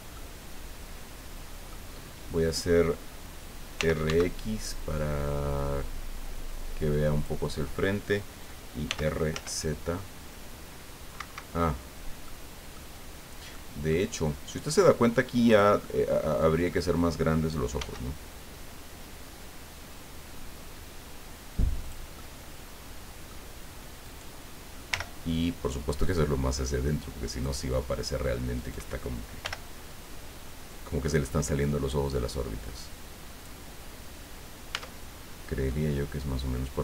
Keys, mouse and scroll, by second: 3.8 r, 4.0 x, 7.1 click, 8.8 r, 9.3 z, 11.1 Escape, 12.2 click, 13.5 middle click, 14.8 click, 15.8-16.9 middle drag, 17.8 s, 21.8 click, 22.2-23.4 middle drag, 24.0 right click, 24.9 l, 26.0-27.6 drag, 28.6 right click, 29.4 l, 30.7-33.6 drag, 34.7 Tab, 35.2 scroll down 1, 35.7-36.8 middle drag.